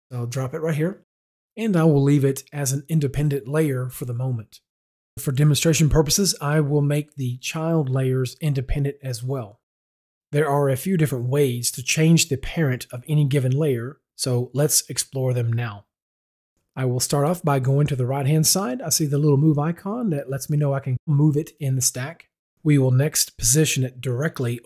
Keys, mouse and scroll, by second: 6.2 click, 9.1 click, 18.6 click.